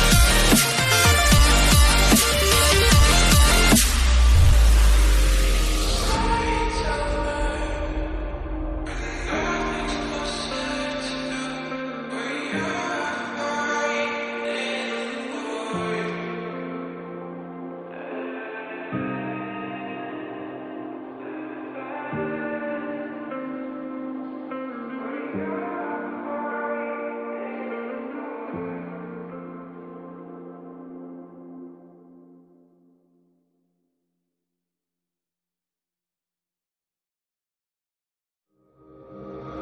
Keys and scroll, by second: 8.8 ctrl+g, 14.5 ctrl+g, 15.6 ctrl+g, 20.0 ctrl+g, 20.2 ctrl+alt+z, 23.3 ctrl+alt+z, 23.5 ctrl+j, 25.3 ctrl+j, 25.5 shift+Down, 33.4-36.7 typing.